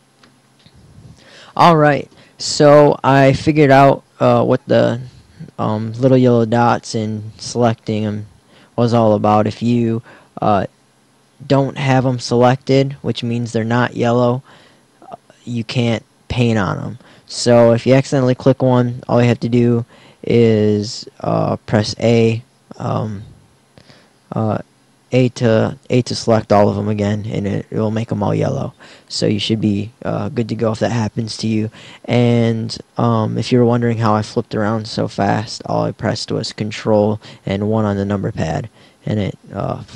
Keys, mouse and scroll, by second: 37.5 ctrl+KP_1.